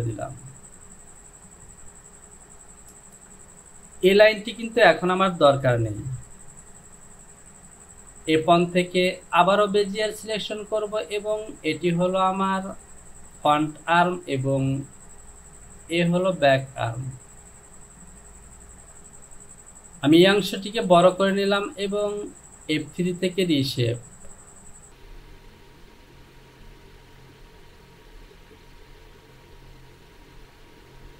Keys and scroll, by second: 5.7 Delete, 18.8 Return.